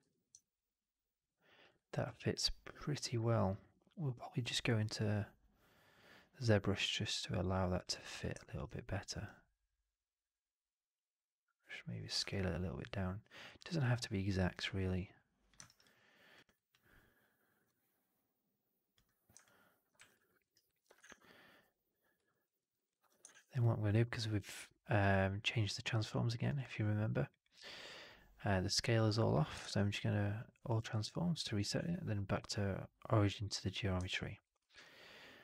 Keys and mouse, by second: 0.3-1.5 alt+drag, 1.6 alt+right drag, 1.9-7.7 drag, 8.3 drag, 9.9-12.0 drag, 12.1-13.3 alt+drag, 13.4 alt+drag, 15.1 click, 15.5 alt+right drag, 15.7-16.2 alt+drag, 16.3 alt+right drag, 16.6-17.5 alt+drag, 19.3-19.8 alt+drag, 19.8 w, 20.2 alt+middle drag, 20.3 alt+right click, 20.5 alt+click, 20.9 shift+Tab, 22.2 alt+click, 22.5 alt+middle drag, 22.6 alt+right drag, 22.8 alt+click, 23.2 shift+Tab, 29.5 shift+Tab, 31.6 shift+Tab, 34.0-34.3 alt+drag, 34.5 f, 34.7-35.4 alt+drag.